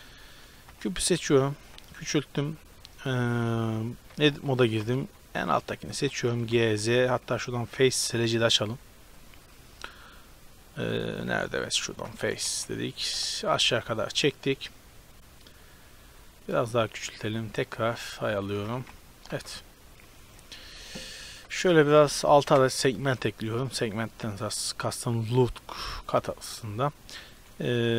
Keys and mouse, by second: 0.7 g, 1.7 s, 2.7 s, 3.2-4.2 drag, 4.2 Tab, 4.5-6.3 typing, 5.5 click, 9.2 click, 12.3 g, 13.5 Tab, 16.6 s, 17.9 Tab, 18.6 g, 19.5 Tab, 20.9 Tab, 21.5 ctrl+r, 27.9 z.